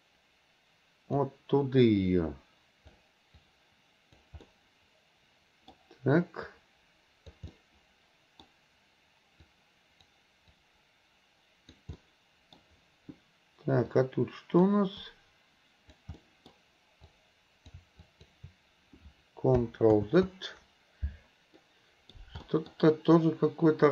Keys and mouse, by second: 2.1 click, 3.4 click, 4.5-5.7 middle drag, 6.5 click, 7.5 middle click, 9.5 click, 10.6-11.8 drag, 12.0 middle click, 13.9 click, 15.1 click, 16.2 middle click, 17.1 click, 18.0 shift+click, 20.0 ctrl+z, 21.6 middle click, 22.5 middle click, 23.2-23.9 drag.